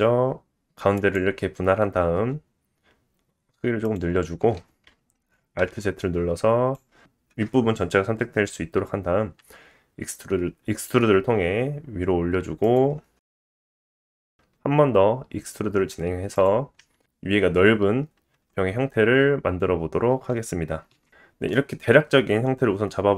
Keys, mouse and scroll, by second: 5.6 alt+z, 5.9-12.7 drag, 9.4 e, 14.3 e, 16.8 s, 21.2 Tab.